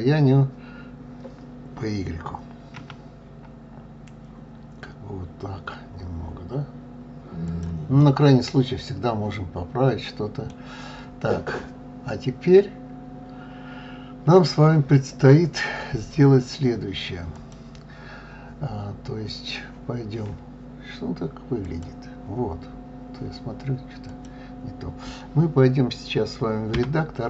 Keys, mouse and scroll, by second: 7.9-10.9 middle drag, 11.0-12.5 scroll up 1, 12.5-13.4 scroll up 3, 13.4-16.4 scroll down 1, 17.3 click, 21.5 click, 22.8-23.3 scroll up 1, 24.0 click, 26.6 Tab.